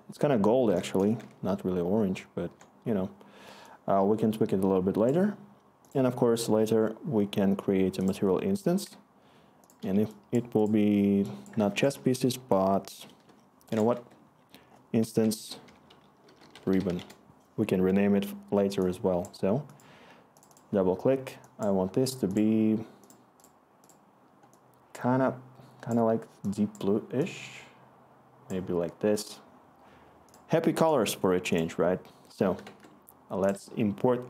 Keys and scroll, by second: 1.2 ctrl+i, 1.7 ctrl+i, 2.1 ctrl+i, 7.8 ctrl+i, 7.9 ctrl+i, 7.9 ctrl+i, 11.7 ctrl+a, 13.9 Right, 15.2 Right, 15.3 Right, 15.6-17.3 typing, 21.2 typing, 32.6 alt+Tab.